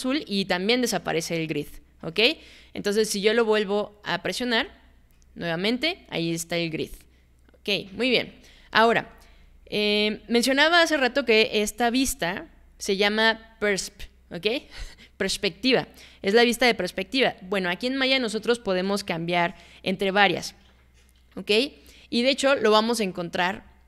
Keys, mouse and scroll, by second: 4.6 click.